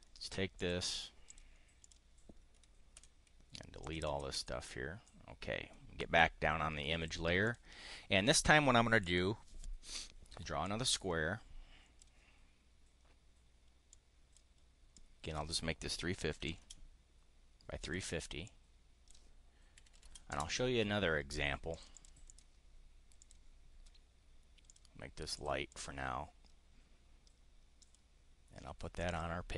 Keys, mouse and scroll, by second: 0.5 click, 1.3 click, 1.7 click, 3.0 Delete, 3.7 click, 4.0 Delete, 5.0-6.0 drag, 7.3 click, 8.9 click, 10.5-12.0 drag, 13.9 click, 14.9 click, 16.1-17.1 typing, 17.8 click, 18.4 click, 19.5-20.5 typing, 21.7 click, 22.2 click, 23.1 click, 24.7 click, 25.3 click, 25.7 click, 27.8 click, 29.1 click.